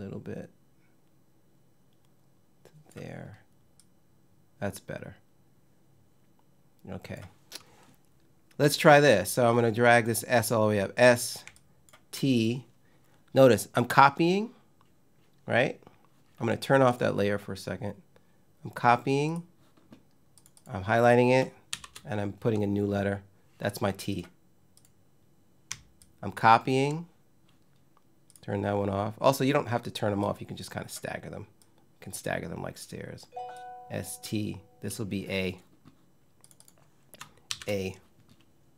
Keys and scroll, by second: 21.4 shift+t, 37.1 shift+a.